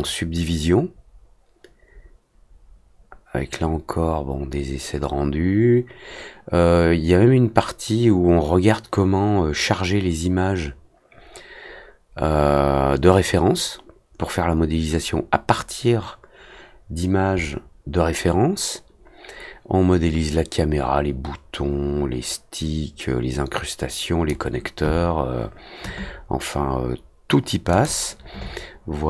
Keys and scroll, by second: 0.0 l, 2.5 Return, 9.8 t, 12.3 z, 14.2 w, 15.7 z, 21.5 w.